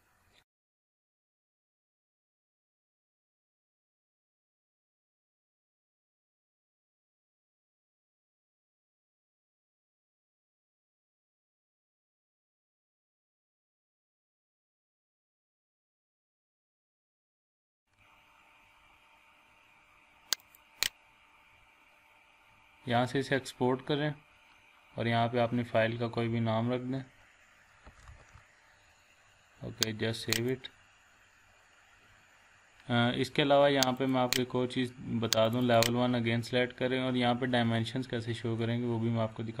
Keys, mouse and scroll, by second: 17.8 click, 20.9 click, 21.1 click, 27.6-28.6 typing, 30.3 click, 34.0 click, 37.0 scroll up 1, 37.5-38.2 scroll down 1, 38.2-38.9 scroll up 1.